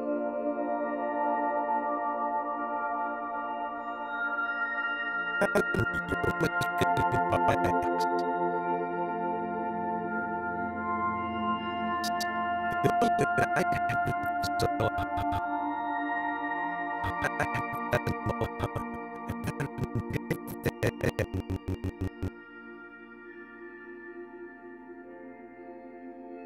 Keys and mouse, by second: 0.0 space, 0.8 click, 1.4 click, 2.2 click, 2.7 click, 3.6 click, 4.8-8.7 drag, 9.1 click, 9.4 click, 10.9 g, 11.2-15.2 drag, 16.0 g, 16.5 click, 17.0-22.0 drag, 24.0 click, 24.3 click.